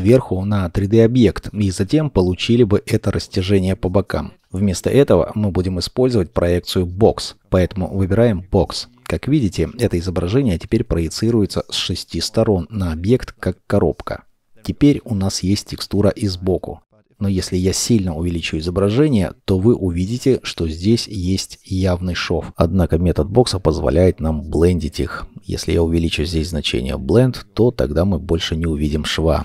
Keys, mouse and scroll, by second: 18.2 shift+middle click.